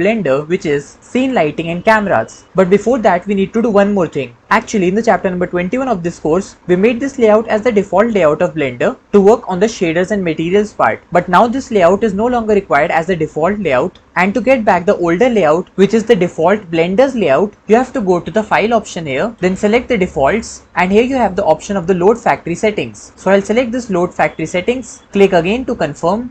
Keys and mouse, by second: 0.3 ctrl+s, 0.5 middle click, 0.5-1.8 typing, 1.9 click, 1.9 middle click, 1.9 right click, 19.2-26.3 drag.